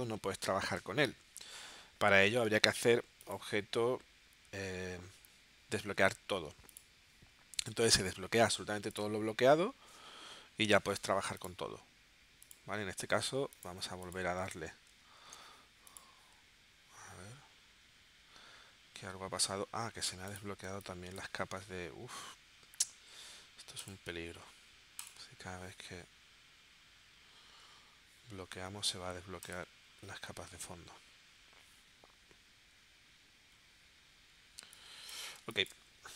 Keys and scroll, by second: 8.0 v, 15.2 shift+super+a, 20.7 space, 34.6 space, 35.4 space.